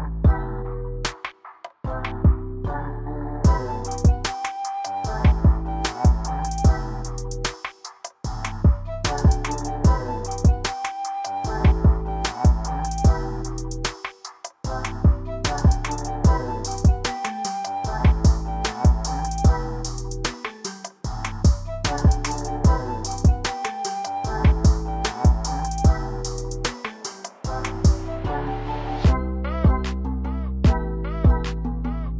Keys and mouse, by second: 13.5-16.7 drag, 19.0-24.4 drag, 26.1-32.1 drag.